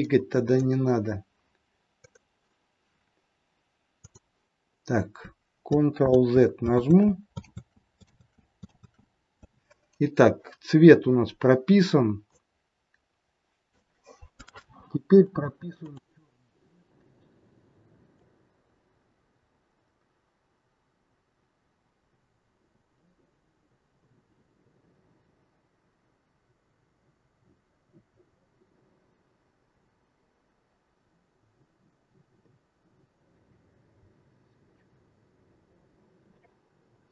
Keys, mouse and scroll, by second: 6.0 ctrl+z, 6.7 ctrl+z, 7.5 ctrl+z, 8.1 ctrl+z, 8.7 ctrl+z, 12.5 click, 15.8 click, 24.0 click, 29.6 click.